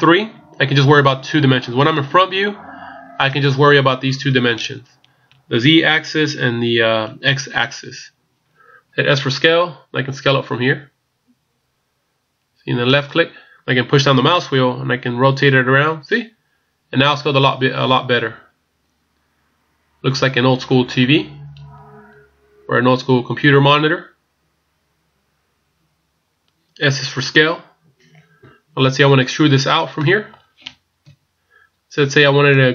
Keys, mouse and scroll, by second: 0.5 scroll down 2, 9.5 s, 14.3 middle click, 30.0 middle click, 31.0 KP_1.